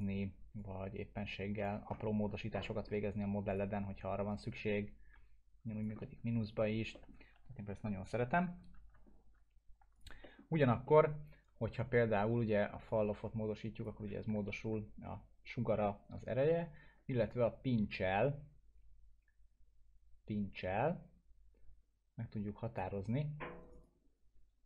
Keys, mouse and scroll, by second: 1.8 scroll down 1, 2.0-3.0 alt+middle drag, 3.5 click, 3.8 scroll up 1, 4.3-5.9 drag, 6.0-7.2 alt+middle click, 7.3 ctrl+z, 8.7 ctrl+z, 9.0 scroll up 1, 9.9 click, 10.2 alt+middle click, 12.9-14.1 drag, 14.4 alt+middle click, 15.1 scroll down 1, 17.2-17.8 drag, 23.6 right click, 23.8-24.6 drag.